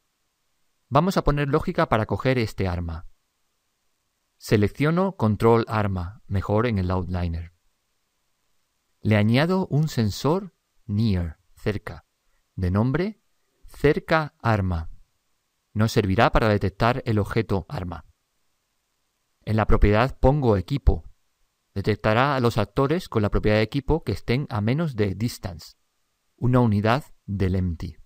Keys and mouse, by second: 5.3 click, 12.3 click, 13.6 click, 15.4 click, 18.8 click.